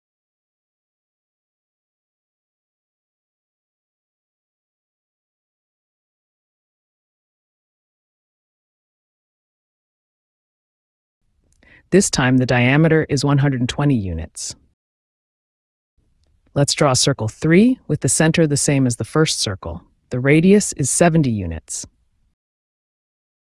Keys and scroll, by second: 7.9 d, 8.9 space, 13.0 KP_1, 13.1 KP_2, 13.3 KP_0, 14.0 Return, 16.4 c, 20.4 space.